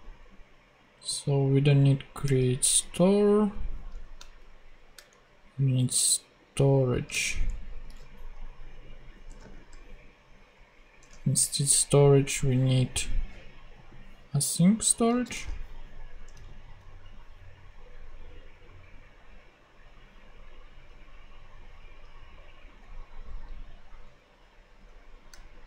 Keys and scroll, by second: 2.2 super+x, 5.0 shift+Down, 6.0 Down, 7.4 super+Up, 7.8 super+x, 9.2 Return, 11.0 super+Tab, 15.1 super+c, 15.3 super+Tab, 16.3 super+v, 24.1 super+Left.